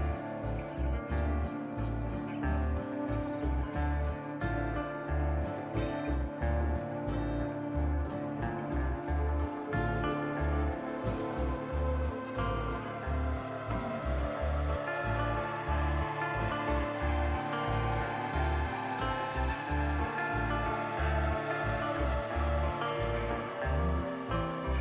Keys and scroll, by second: 0.5 ctrl+z, 1.1 ctrl+z, 5.5 ctrl+z, 22.8 ctrl+z.